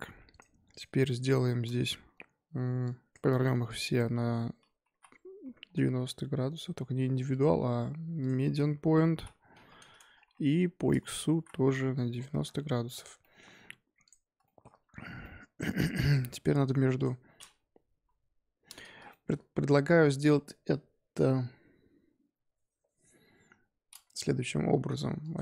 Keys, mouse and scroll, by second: 0.3 click, 0.7 click, 1.4-2.8 shift+middle drag, 2.8 click, 3.6 click, 4.8 r, 7.3-9.0 drag, 9.0 r, 10.3 scroll down 2, 10.4-11.2 middle drag, 11.2 r, 12.9 click, 13.2-13.5 middle drag, 13.5-14.0 scroll up 1, 14.0 click, 14.4 shift+middle drag, 14.7-15.2 scroll up 1, 15.2-16.9 middle drag, 16.9 click, 17.5-17.9 scroll up 2, 17.9 KP_1, 18.0 scroll down 2, 19.1-19.7 shift+middle drag, 19.7-22.2 scroll up 2, 25.2 shift+click.